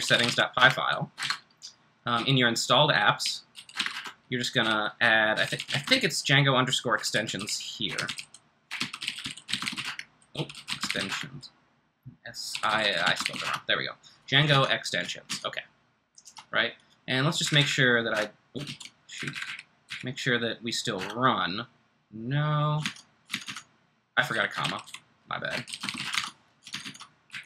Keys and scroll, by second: 0.0-13.9 typing, 14.5 super+Tab, 15.2 super+Tab, 17.4 Up, 17.6 Up, 18.1 Return, 19.1 Up, 19.1 ctrl+c, 19.3 Up, 19.4 Up, 19.8 Up, 20.9 Return, 22.8 super+Tab, 23.3 super+Tab, 23.4 super+Tab, 24.4-26.4 typing, 26.7 super+Tab, 27.3 super+Tab.